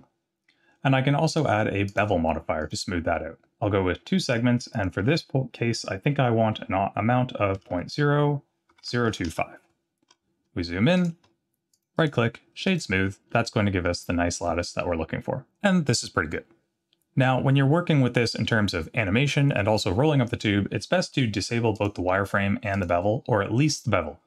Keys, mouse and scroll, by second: 1.3 click, 1.9-2.8 drag, 4.2 click, 4.7-9.7 drag, 10.1-10.7 scroll up 4, 10.9 click, 11.2-11.7 scroll up 3, 11.7 click, 12.0 right click, 13.3-13.9 middle drag, 14.0-14.6 scroll down 3, 14.9 scroll down 1, 21.7 click, 22.7 click.